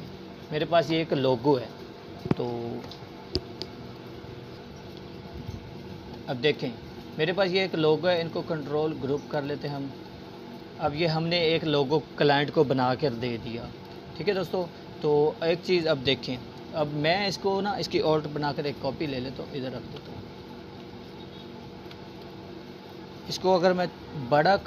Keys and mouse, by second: 2.7 right click, 3.8-6.0 drag, 13.0-14.6 alt+drag, 15.7-16.6 alt+drag, 19.1-20.0 alt+shift+drag, 21.5 space, 23.0 space, 23.7-24.6 drag.